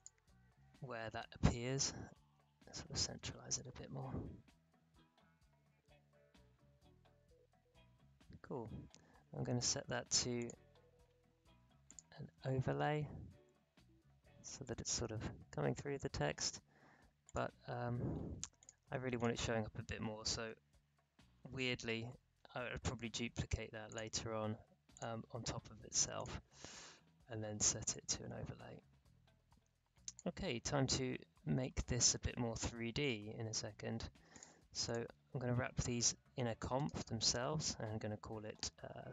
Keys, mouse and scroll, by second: 1.2 shift+Right, 2.3 Right, 3.0 space, 8.2 space, 10.3 click, 12.8-13.5 alt+scroll up 1, 13.5 alt+scroll down 1, 14.1-15.1 alt+scroll up 1, 15.5-16.2 alt+scroll down 1, 16.2 scroll down 1, 17.2 click, 23.8-31.1 drag, 31.1-31.6 alt+scroll down 2, 31.6-32.4 alt+scroll up 2, 34.3 click, 34.8 shift+click, 36.7 right click.